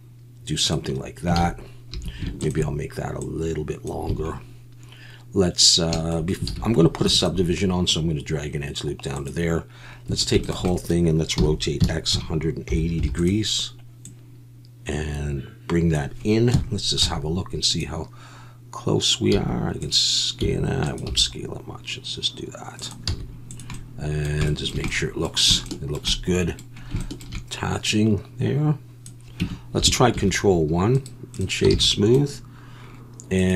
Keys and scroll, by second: 1.4 alt+a, 1.9 2, 4.1 a, 6.5 alt+a, 7.0 ctrl+r, 10.1 a, 11.4-13.0 typing, 16.5 KP_1, 17.0 z, 19.3 s, 20.4 s, 21.1 g, 23.1 z, 29.4 Tab, 30.2 ctrl+1, 31.7 alt+a.